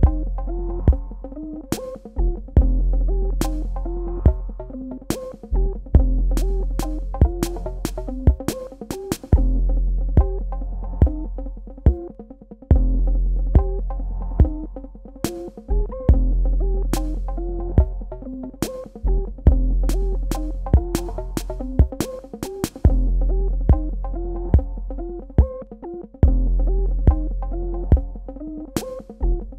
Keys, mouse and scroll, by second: 2.9-3.6 scroll up 1, 3.6-4.0 scroll down 1, 4.7-5.7 scroll up 1, 5.7-6.8 scroll down 1, 7.5 click, 11.5 ctrl+space, 11.8 ctrl+click, 12.1 ctrl+space, 12.5 ctrl+click, 14.1 click, 17.5 shift+click, 17.7 shift+space, 18.1 ctrl+click, 20.2 space, 20.6 ctrl+alt+click, 22.2 ctrl+click, 24.2 space, 24.4 click, 24.7 space, 25.3 ctrl+click, 26.3 ctrl+alt+click, 27.3 ctrl+alt+click, 28.5 Tab.